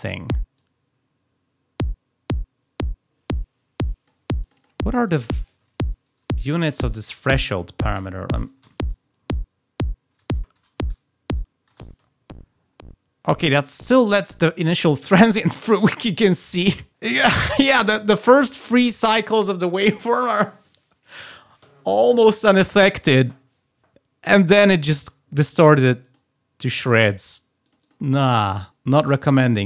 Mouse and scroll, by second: 0.5 click, 4.3 click, 4.9 click, 15.6 click, 15.8 click, 16.7 click, 26.7 click, 27.6 click, 29.5 click.